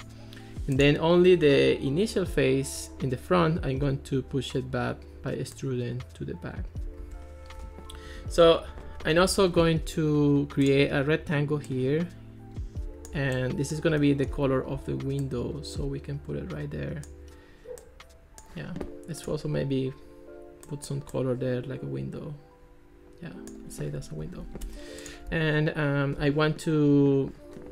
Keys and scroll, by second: 7.0 Escape, 8.0 alt+r, 24.7 Escape.